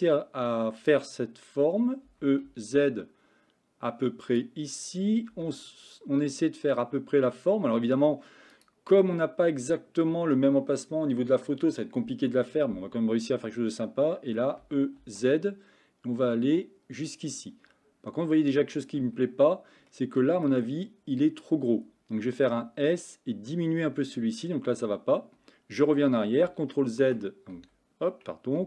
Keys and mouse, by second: 2.1 e, 5.3 s, 14.7 e, 19.9 middle click, 22.5 s.